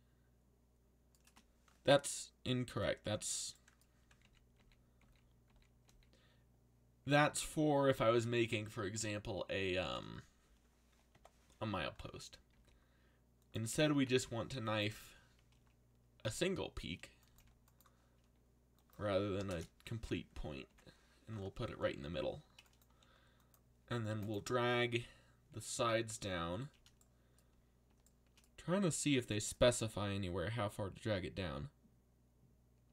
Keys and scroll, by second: 3.0 z, 4.2 ctrl+z, 4.5 ctrl+z, 5.0 ctrl+z, 5.4 ctrl+z, 5.8 ctrl+z, 7.0 ctrl+z, 12.5-14.4 typing, 14.9 Return, 19.3 0, 19.5 Return, 22.0 z, 22.9 c.